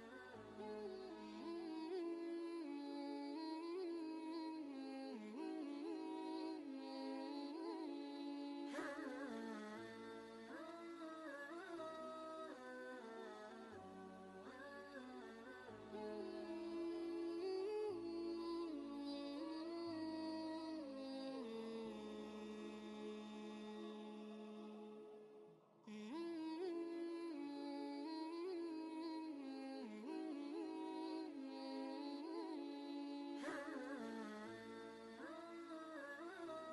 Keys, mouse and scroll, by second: 0.6 click, 3.4 scroll down 1, 3.4 typing, 5.6-6.0 scroll down 1, 7.3 right click, 8.7 click, 10.0 alt+Tab, 11.6 ctrl+v, 12.1 ctrl+space, 12.2 ctrl+click, 12.6 ctrl+space, 12.9-15.4 drag, 16.7 ctrl+space, 16.9 ctrl+click, 17.3 ctrl+space, 18.1 ctrl+space, 19.4-21.5 drag, 21.2 typing, 21.5 alt+Tab, 22.5 scroll up 1, 22.6 typing, 23.7 scroll down 1, 26.2 scroll down 1, 26.3 scroll up 1, 29.4 click, 31.0-31.3 scroll down 1, 36.2 right click.